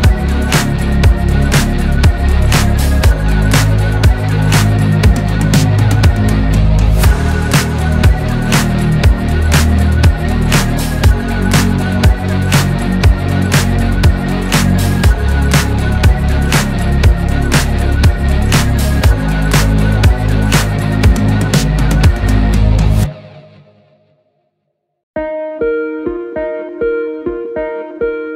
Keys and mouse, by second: 0.0 click, 6.6 click, 20.0 click.